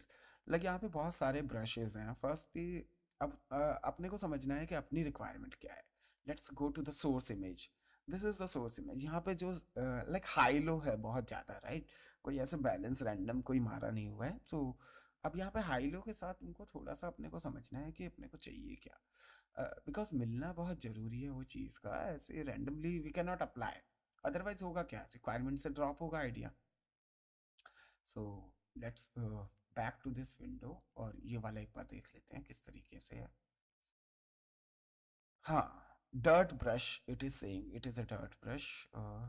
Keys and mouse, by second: 5.0 click, 6.1 click, 14.4 click, 30.8 click.